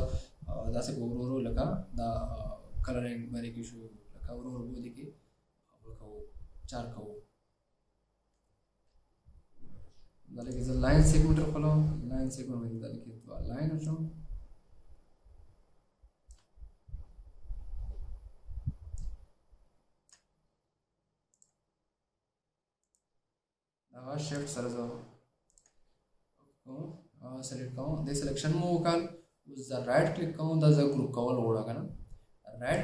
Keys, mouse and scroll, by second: 24.4 shift+click, 25.8 shift+click.